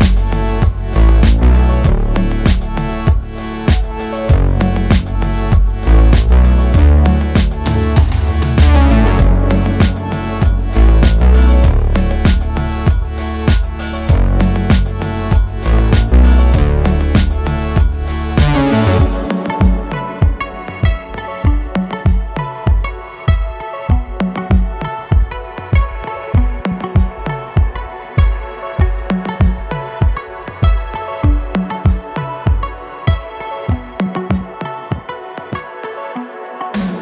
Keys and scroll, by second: 8.9 ctrl+b.